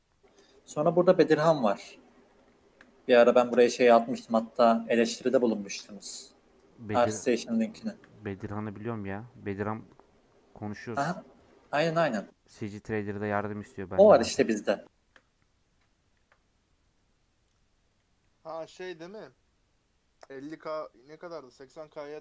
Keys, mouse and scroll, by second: 2.5 shift+middle click, 3.0 ctrl+r, 5.4 ctrl+r, 7.7 shift+middle click, 8.3 ctrl+r, 11.7 ctrl+r, 14.6-16.1 shift+middle drag, 16.1 ctrl+r, 18.2 middle click, 19.1 ctrl+b.